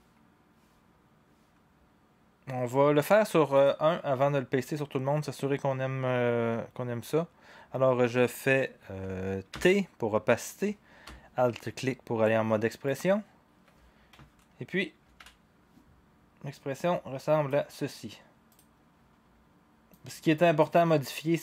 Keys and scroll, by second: 9.5 t, 15.0 ctrl+v.